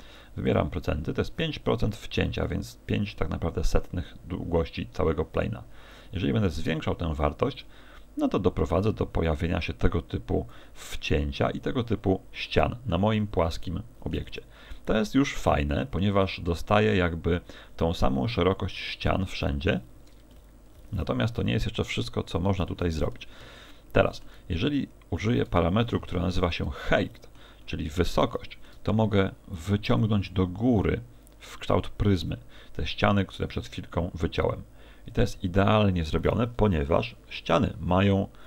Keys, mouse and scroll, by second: 4.7 click.